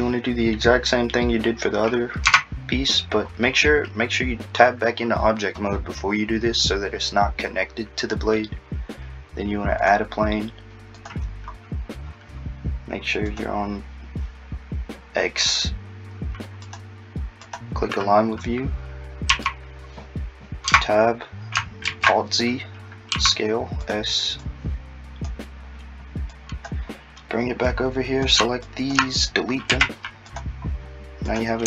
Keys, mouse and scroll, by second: 2.2 click, 2.3 Tab, 2.6-3.2 scroll down 2, 3.2-6.0 scroll down 1, 6.0 scroll down 3, 9.8 click, 16.7 click, 19.3 a, 20.7 Tab, 21.9 alt+z, 23.1 s, 24.4 click, 27.7 click, 28.7 shift+click, 29.7 x, 30.7-31.3 scroll up 2, 31.3 click.